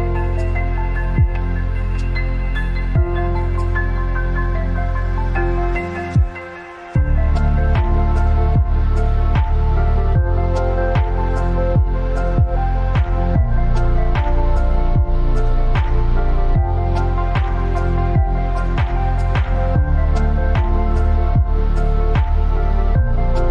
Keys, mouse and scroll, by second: 2.2 click, 8.2 click, 12.9 click, 15.4 click, 19.2-21.0 scroll down 1, 22.0-23.5 scroll down 1.